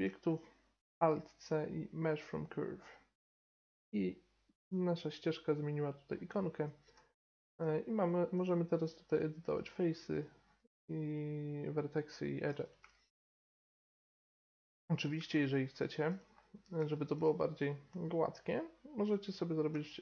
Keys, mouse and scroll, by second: 0.9 alt+c, 4.4-6.4 middle drag, 6.9 Tab, 8.7-12.4 drag, 12.4-15.6 middle drag, 14.3 KP_7, 15.6 click, 15.9-19.0 middle drag, 19.0 right click.